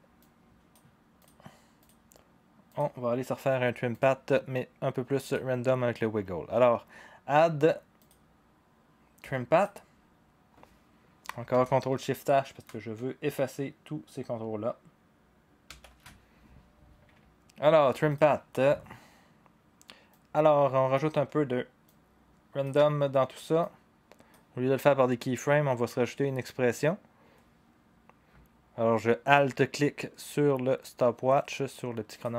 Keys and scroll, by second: 15.7 ctrl+shift+h.